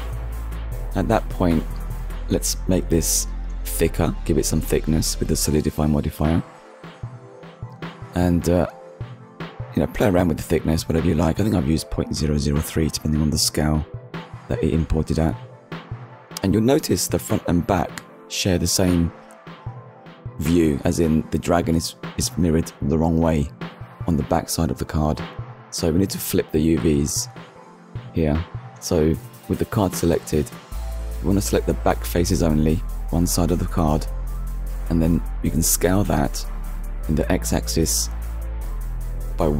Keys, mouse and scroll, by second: 0.0 click, 0.9 click, 2.9 click, 4.0 middle click, 5.6 Return, 6.5 scroll down 1, 7.2 shift+middle click, 7.6 middle click, 9.6 click, 10.3 click, 11.2 click, 11.6 middle click, 13.2 click, 13.9 scroll up 1, 16.1 Tab, 22.1 click, 23.4-23.9 scroll down 1, 24.0 scroll down 1, 24.6 shift+middle click, 25.5 middle click, 27.6 scroll up 1, 28.2-28.7 scroll up 1, 28.7 middle click, 28.8 scroll up 1, 32.9 a, 36.0 s, 36.4 x, 36.9 -, 37.1 1, 38.7 Return.